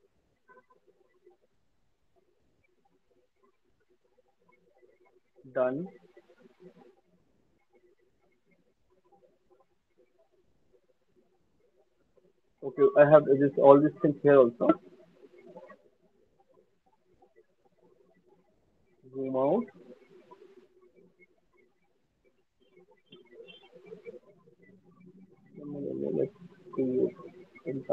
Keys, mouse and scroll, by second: 1.6 click, 3.7 shift+click, 3.8 shift+click, 5.0 alt+middle click, 5.2 alt+click, 6.1 alt+middle click, 6.4 alt+middle click, 8.3 alt+click, 9.3 alt+middle click, 9.3 alt+right click, 10.2 click, 10.4 middle click, 11.1 alt+right click, 11.1 middle click, 11.3 alt+middle click, 11.6 click, 12.0 click, 12.2 alt+click, 14.5 click, 14.8 alt+click, 15.2 alt+right click, 15.6 alt+middle click, 15.8 alt+middle click, 15.8 alt+click, 16.2 alt+click, 16.8 alt+click, 17.3 alt+right click, 17.3 alt+middle click, 18.7 alt+click, 19.1 alt+middle click, 19.6 alt+click, 19.9 alt+click, 20.1 alt+middle click, 20.1 alt+right click, 20.7 alt+click, 22.0 click, 23.7 shift+click, 26.1 click.